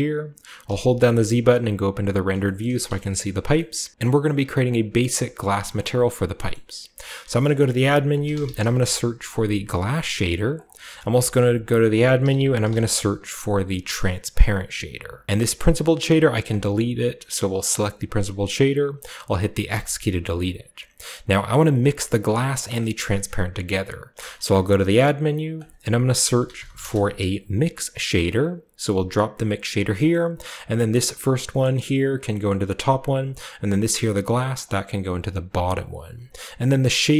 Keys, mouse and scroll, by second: 0.6-1.3 typing, 2.6 shift+middle drag, 2.6 typing, 3.0 shift+middle click, 3.4-3.9 shift+scroll up 1, 3.7-5.3 shift+middle drag, 3.9-4.6 scroll down 1, 4.6-5.3 scroll down 1, 5.2-7.1 drag, 6.5-7.1 middle drag, 6.9-8.5 typing, 7.4 shift+click, 9.7 click, 10.3 click, 11.0 typing, 12.1-12.6 typing, 12.8-14.2 drag, 14.3 click, 15.2-16.4 drag, 16.6 click, 17.6 click, 19.8 x, 20.2 click, 21.8 click, 22.7-23.9 middle drag, 24.1 shift+a, 25.5 click, 26.3-26.7 typing, 28.2 click, 29.3 drag, 32.9-33.4 drag, 33.5-34.5 drag, 35.7-37.1 drag.